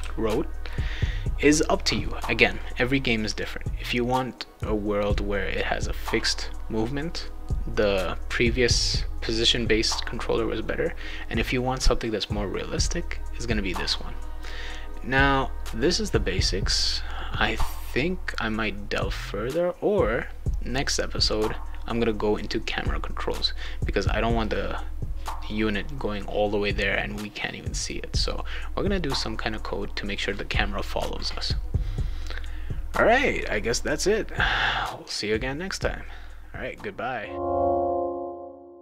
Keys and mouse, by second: 0.0-0.5 typing.